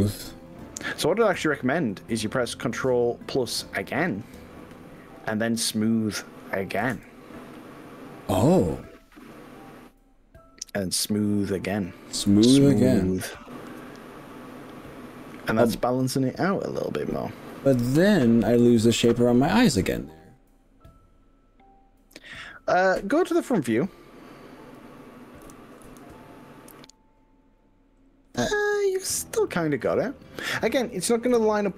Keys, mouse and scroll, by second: 2.0 middle click, 2.8 middle click, 3.6-4.6 middle drag, 6.8 ctrl+KP_Add, 12.6 click, 16.6 click, 17.7-19.8 middle drag, 23.7 z, 25.4 KP_3, 25.9 KP_1, 27.4 scroll up 3, 27.9 scroll down 2, 28.6-29.8 middle drag, 30.2 shift+middle click, 31.3 KP_1.